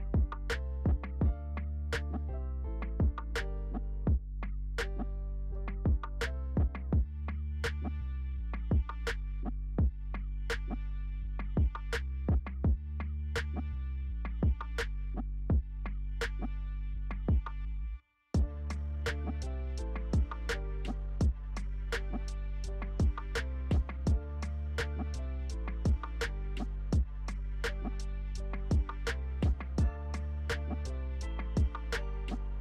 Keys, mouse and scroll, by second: 2.2-7.6 alt+drag, 7.6-9.3 alt+shift+right drag, 9.3-20.6 alt+drag, 20.6 alt+right click, 22.5 alt+shift+click, 23.9 alt+c, 25.0-29.3 alt+drag, 29.3 right click, 29.4-31.3 alt+right drag, 31.3-32.6 alt+drag.